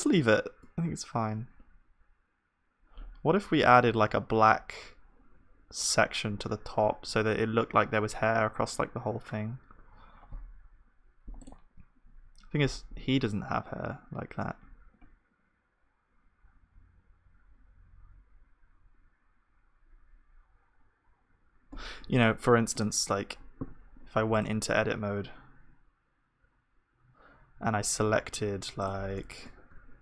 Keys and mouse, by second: 10.3-23.1 middle drag, 23.1-24.7 drag, 24.7 Tab, 29.2-30.0 drag, 29.2-30.0 middle drag.